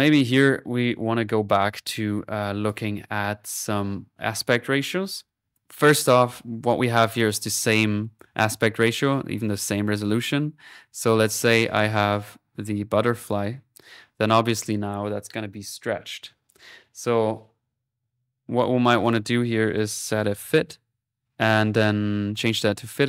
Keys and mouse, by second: 2.4 click, 3.7 right click, 4.7 right click, 5.5 click, 5.9 click, 6.4 right click, 7.1-8.6 drag, 11.2 click, 18.1 typing, 18.5 right click, 19.0-20.0 drag, 19.8-20.9 typing, 22.3-23.0 drag.